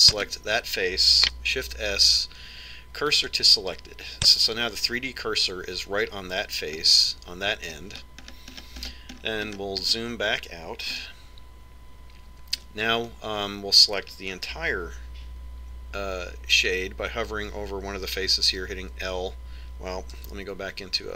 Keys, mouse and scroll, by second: 1.3 right click, 2.6 shift+s, 8.0-9.7 middle drag, 9.7-10.6 scroll down 1, 10.6-13.9 middle drag, 20.0 l.